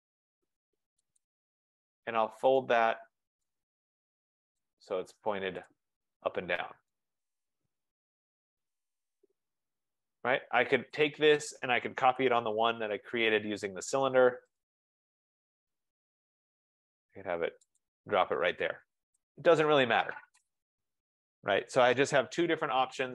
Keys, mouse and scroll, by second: 1.3 click, 1.6-2.0 scroll, 3.5 right click, 4.7 click, 5.8 click, 6.3-6.8 scroll, 9.9 right click, 10.4 scroll, 11.1 click, 12.2-13.2 typing, 14.7 click, 14.9-15.4 scroll, 16.1 middle click, 16.2 middle click, 16.3 scroll down 5, 18.0 click, 18.1 scroll, 19.4 Escape, 19.6 Escape, 20.2-21.2 scroll.